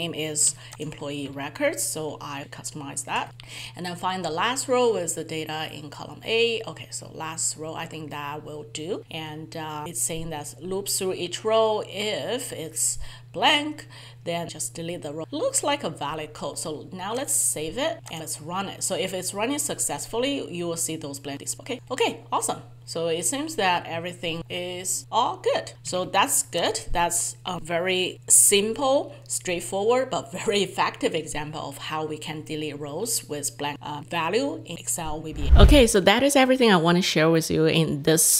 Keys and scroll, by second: 0.3 ctrl+f, 0.5 typing, 1.3 alt+Tab, 3.2 ctrl+v, 25.9 alt+Tab.